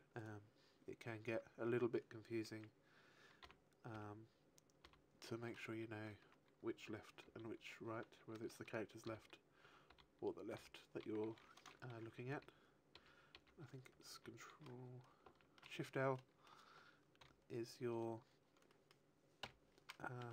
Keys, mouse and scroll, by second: 0.0 right click, 1.2 Tab, 2.3 a, 3.4-6.1 typing, 5.2 middle click, 7.2 l, 9.0 l, 9.0 a, 9.8 l, 12.0 l, 12.9 alt+l, 13.3 alt+l, 14.0 ctrl+l, 15.2 shift+l, 17.1 Delete, 17.1 middle click, 18.6 middle click, 19.4 KP_1, 20.2 shift+middle click.